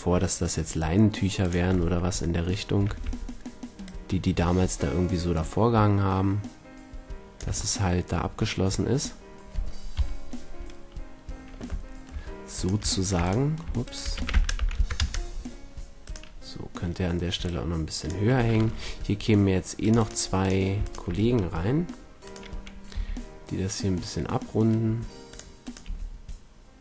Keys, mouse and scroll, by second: 1.4-5.5 drag, 2.8 a, 2.9 a, 7.7 click, 9.9 KP_3, 12.5-13.7 right drag, 14.1 s, 16.4-17.5 middle drag, 17.4 drag, 17.7-19.2 drag, 18.5 ctrl+r, 19.9-21.7 drag, 21.7-24.0 right drag, 22.9 g, 25.3 click, 25.5-26.8 right drag, 25.7 g.